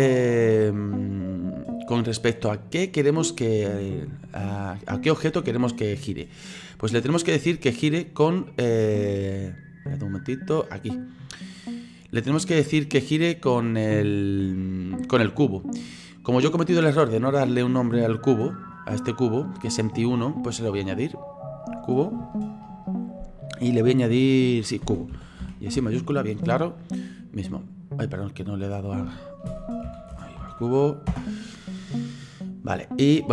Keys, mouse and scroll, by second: 18.7 right click, 21.0 click, 21.2 click, 28.4 click, 28.6 click.